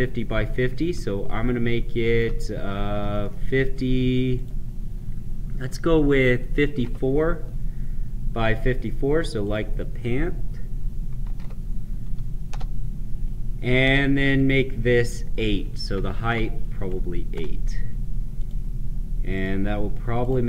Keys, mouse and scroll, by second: 2.9 middle click, 4.2 click, 6.5 typing, 8.9 typing, 9.4 click, 11.2 typing, 12.4 Return, 15.9 click, 18.3 click.